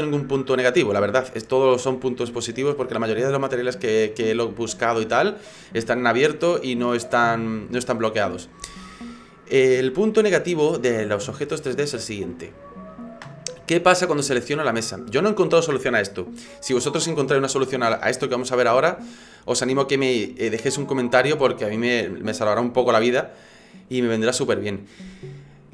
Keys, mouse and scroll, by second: 12.5 click, 14.4 right click.